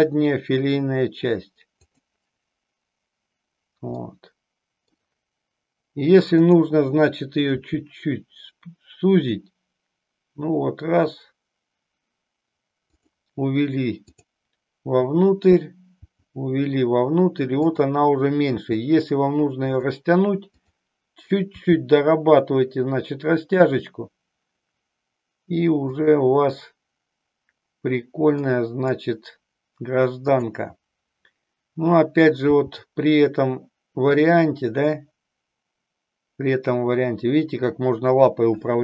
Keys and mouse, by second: 1.8 click, 4.0-5.0 middle drag, 8.0 g, 13.1 click, 16.0 g, 18.5 g, 19.7 click, 20.6 click, 22.5 g, 26.1 click, 28.3-30.5 drag, 32.5 g.